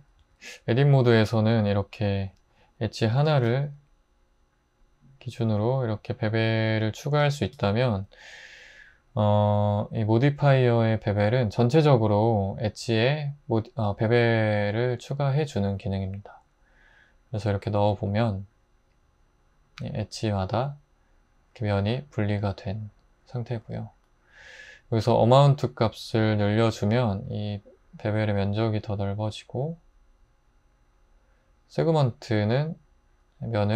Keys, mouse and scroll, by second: 0.2 Tab, 3.1 super+b, 7.1 super+z, 7.5 Tab.